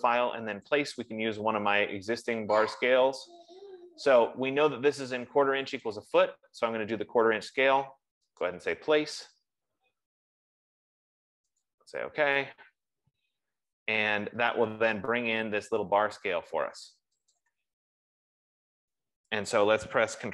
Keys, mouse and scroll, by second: 1.1 click, 6.3 click, 8.8 click, 12.4 click, 18.1 click.